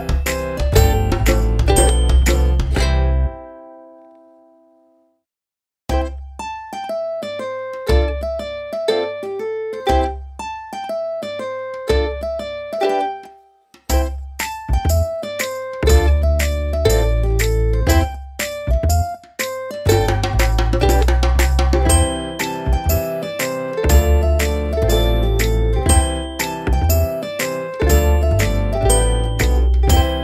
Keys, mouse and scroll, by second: 1.7 ctrl+z, 2.3 click, 13.7 alt+click, 16.3-17.4 typing, 20.3 click, 26.0 click, 26.7 a, 27.7-28.0 typing, 28.3 Return.